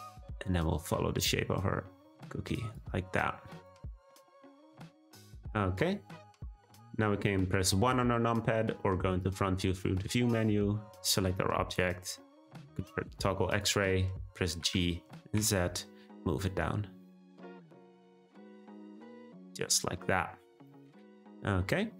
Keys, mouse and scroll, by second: 3.6 click, 4.6 Tab, 5.0 click, 5.4-6.6 middle drag, 10.3 click, 12.8 z, 14.6 g, 18.9 click, 19.3-21.6 middle drag, 21.6-21.9 scroll up 2.